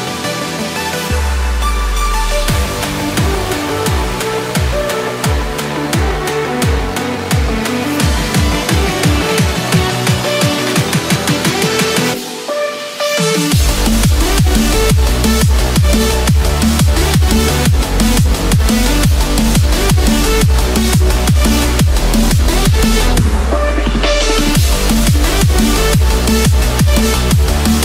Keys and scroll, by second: 9.7 ctrl+=, 19.4 ctrl+z.